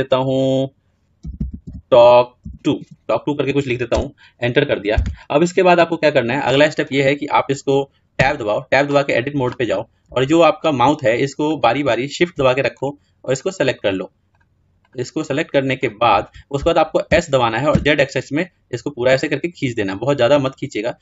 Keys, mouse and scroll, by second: 8.2 Tab, 9.0-10.1 scroll up 4, 10.1-11.3 shift+middle drag, 11.3-17.0 drag, 17.0 s.